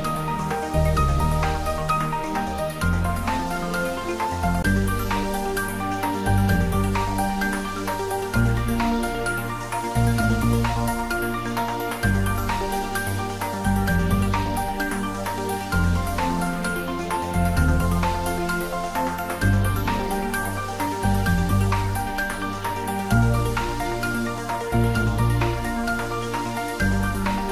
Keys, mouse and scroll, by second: 0.7 click, 1.3 Tab, 1.9 scroll down 1, 2.3-5.0 middle drag, 5.0 scroll up 1, 5.7 Tab, 6.0-8.8 middle drag, 8.8 shift+click, 10.6-11.8 typing, 13.1 click, 13.4 middle click, 13.8 Tab, 14.2 middle click, 15.3 Tab, 15.8 middle click, 16.8-17.5 scroll up 1, 17.5 click, 19.0 shift+click, 19.8 middle click, 21.0 shift+click, 25.3 middle click, 25.9-26.6 scroll down 2, 26.8 shift+click.